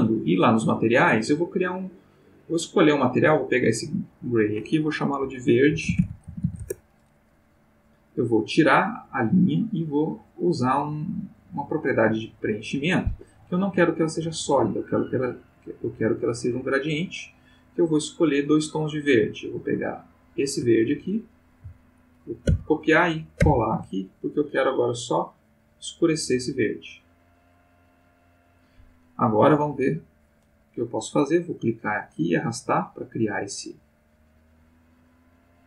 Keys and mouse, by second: 0.2 click, 2.8 click, 3.9 click, 5.7-6.4 typing, 6.6 shift+Return, 8.7 click, 12.6 click, 13.1 Escape, 13.8 click, 16.4 click, 17.4 click, 18.4-20.4 drag, 22.4 ctrl+c, 23.4 ctrl+v, 23.9 ctrl+click, 25.0-28.1 drag, 32.0-35.6 drag.